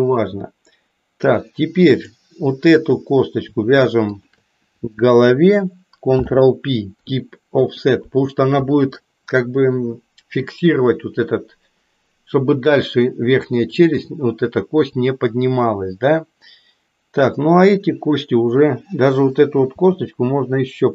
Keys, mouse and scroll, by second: 2.0 click, 4.0 shift+click, 6.0 ctrl+p, 19.8 g.